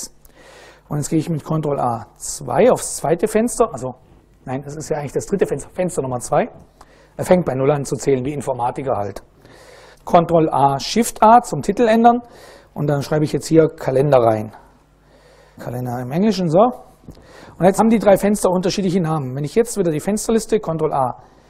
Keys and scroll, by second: 1.1 ctrl+a, 2.1 2, 10.0 ctrl+a, 10.8 shift+a, 11.8 BackSpace, 12.8-16.1 typing, 20.0 ctrl+a, 21.3 shift+'.